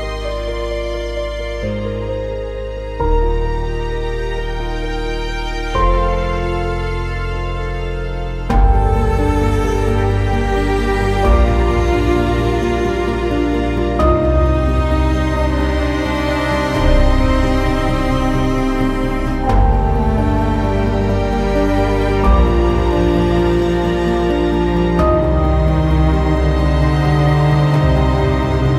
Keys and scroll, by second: 14.1 ctrl+z.